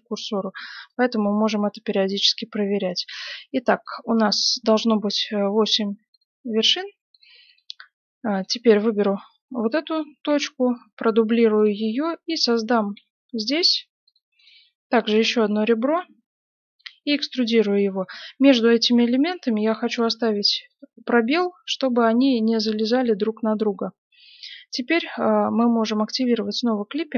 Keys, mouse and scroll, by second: 1.0 g, 2.8 right click, 3.1 g, 5.4-10.1 right drag, 5.6 g, 6.6 g, 10.2 shift+d, 12.0-13.8 middle drag, 12.9 e, 14.3-15.9 right drag, 15.9 e, 18.4 right click, 19.3 g, 20.7 right click, 20.9 g, 23.5 right click, 26.1-27.1 drag.